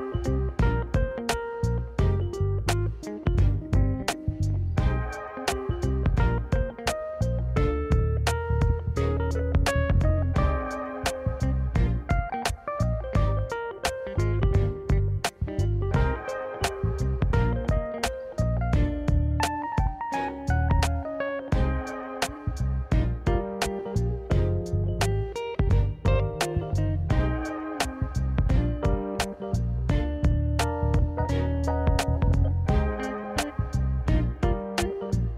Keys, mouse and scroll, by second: 0.1 click, 0.4 middle click, 0.5 Tab, 0.8 click, 1.3 2, 1.4 click, 1.8 shift+click, 2.1 middle click, 2.5 shift+click, 2.9 x, 3.8 middle click, 4.3 click, 4.6 click, 4.8 Tab, 5.3 ctrl+a, 6.0-7.2 drag, 8.0-9.4 drag, 9.5 middle click, 9.8 middle click, 10.1 middle click, 10.3-10.9 scroll down 1, 10.9 middle click, 11.0 Tab, 11.3 middle click, 11.5 click, 12.0 middle click, 12.7 shift+click, 12.9 middle click, 13.2 middle click, 13.5 shift+click, 13.7 middle click, 14.1 shift+click, 14.4 middle click, 14.9 ctrl+b, 18.1 Tab, 18.2-18.8 middle drag, 19.6 ctrl+z, 19.8 ctrl+z, 20.2 middle click, 21.1-21.6 drag, 21.8 Tab, 22.6-22.9 drag, 23.1 middle click, 23.2 Tab, 23.4 middle click, 24.4 middle click, 25.0 shift+click, 25.5 shift+click, 25.7 middle click, 26.2 shift+click, 26.6 ctrl+z, 26.9 shift+click, 27.4 shift+click, 27.6 scroll up 1, 27.7 middle click, 28.3 middle click, 28.9 ctrl+b, 30.4 middle click, 31.1 shift+click, 31.3 middle click, 31.8 ctrl+b, 33.3 middle click, 33.6 middle click, 34.0 shift+click, 34.2 middle click, 34.7 shift+click, 34.9 middle click.